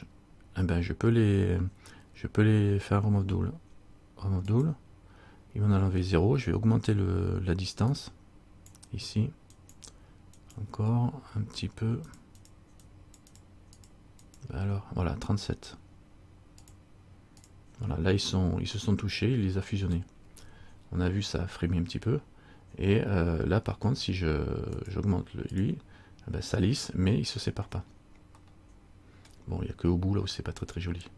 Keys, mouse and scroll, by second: 4.7 click, 8.1 click, 9.7 click, 10.5 click, 12.2 click, 12.7 click, 13.2 click, 13.6 click, 14.0 click, 14.5 click, 16.9 click, 17.5 click, 24.9 click, 25.7 click, 28.0-28.5 scroll down 3, 28.6 middle click.